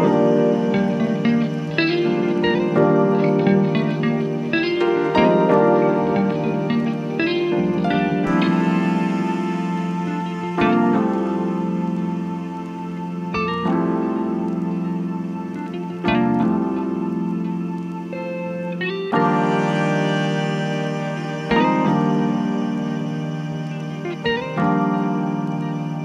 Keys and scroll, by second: 2.3 c, 6.7 c, 10.1 c, 12.6 c, 16.8 ctrl+z, 17.4 ,, 20.7 F9.